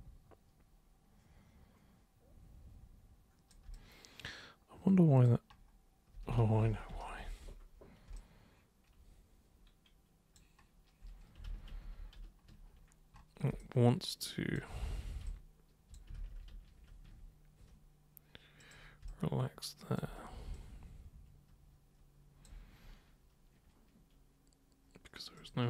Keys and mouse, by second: 3.8-5.3 alt+super+drag, 6.6 ctrl+super+z, 6.9 ctrl+super+z, 7.2 ctrl+super+z, 8.1-10.3 alt+super+drag, 11.5 ctrl+super+z, 11.7 ctrl+super+z, 12.0 ctrl+super+z, 13.6 alt+super+click, 14.8 ctrl+super+z, 15.2 super+space, 15.2 super+click, 16.2 ctrl+super+z, 16.4 ctrl+super+z, 18.6 super+click, 19.1 alt+super+click, 20.5-22.4 alt+super+drag, 25.4 super+click.